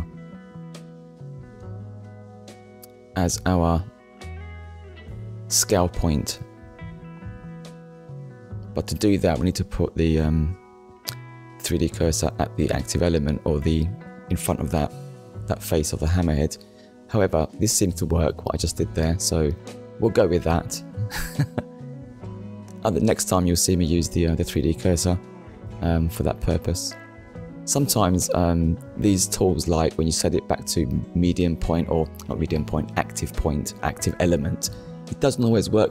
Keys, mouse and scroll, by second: 1.8 click, 9.6 click, 10.4 click, 11.8 click, 12.7 click, 14.0 Tab, 14.8 click, 16.9 click, 18.5 click, 27.5 click, 28.5 Tab, 29.1 middle click, 30.3 click, 31.8 click, 32.9 click, 34.9 click.